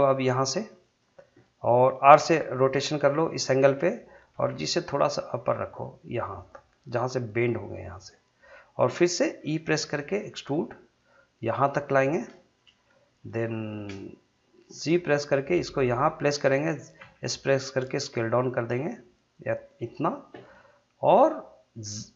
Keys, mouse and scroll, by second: 0.8 click, 2.2 r, 3.2 click, 4.3 g, 7.9 click, 9.6 e, 11.8 click, 11.8 click, 12.2-12.6 scroll down 1, 12.8 shift+middle click, 14.7 g, 16.3 click, 17.0 s, 19.7 click.